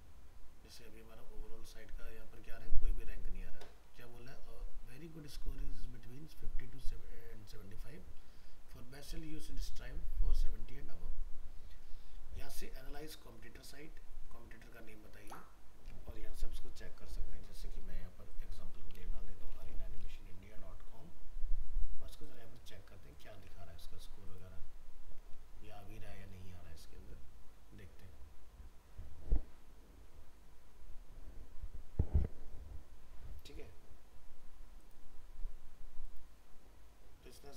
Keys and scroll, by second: 20.1 ctrl+a, 20.3 ctrl+c, 23.4 ctrl+v.